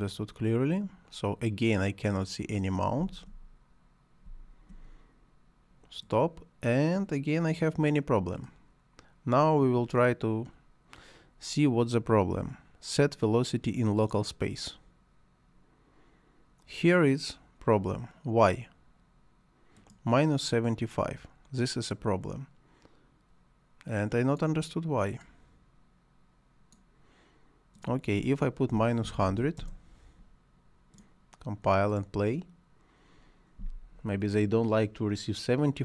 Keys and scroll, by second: 2.9 space, 28.4-29.7 typing.